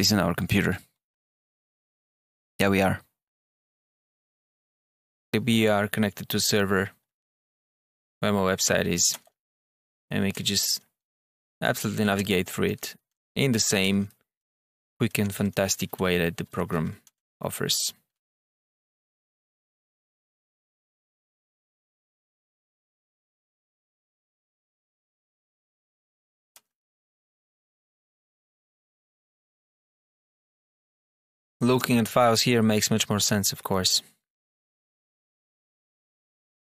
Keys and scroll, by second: 23.7 Down, 24.3 Up.